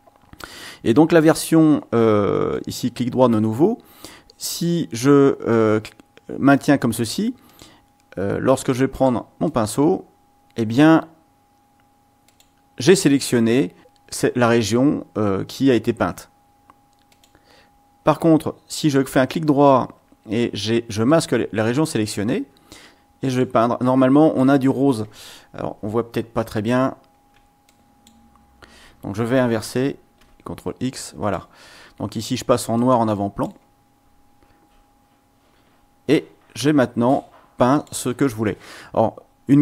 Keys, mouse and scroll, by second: 2.5 right click, 7.4 click, 8.9 click, 9.4-11.0 drag, 12.2 click, 17.1 click, 18.9 right click, 21.1 click, 22.9 click, 23.8 click, 26.7-27.4 ctrl+scroll up 2, 27.7 ctrl+click, 30.2 x, 30.5 click, 32.7 click, 37.7 click.